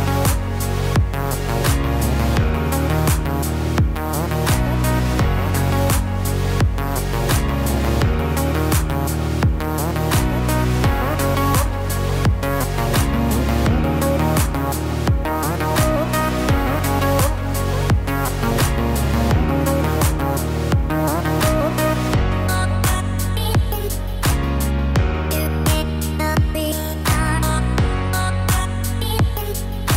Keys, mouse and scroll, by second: 0.6 g, 4.6 click, 6.9 g, 12.0 click, 13.1 g, 16.9 ctrl+r, 26.6 middle click.